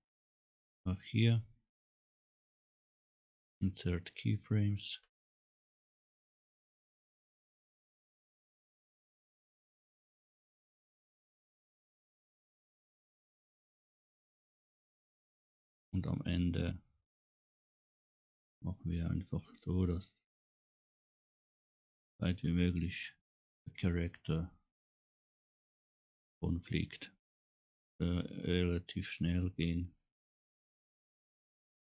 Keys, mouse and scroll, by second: 0.2-1.6 middle drag, 1.6 click, 2.4-4.1 right drag, 6.1 click, 7.5 scroll up 1, 8.1 scroll down 1, 13.5 click, 17.8-19.5 drag, 22.2-23.2 drag, 23.5-25.1 drag, 23.5 right click, 25.1 right click, 27.3-28.5 drag, 30.3 click.